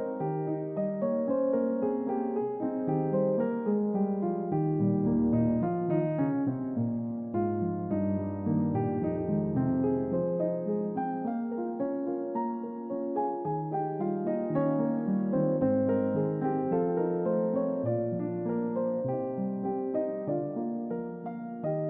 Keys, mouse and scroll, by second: 0.3 middle click, 0.3 scroll down 2, 2.1 alt+z, 2.6 click, 3.2-3.6 middle drag, 3.2-3.6 scroll down 2, 3.7 click, 4.1-4.6 middle drag, 4.8-5.2 scroll down 2, 5.2-7.0 middle drag, 7.6 click, 8.4 Tab, 9.0-10.1 middle drag, 10.9 click, 11.6-12.3 scroll up 3, 15.2 click, 15.9 click, 17.2 g, 18.0 middle click, 18.0-18.5 scroll down 3, 18.4 middle click, 18.5-19.0 scroll up 2, 21.5 y.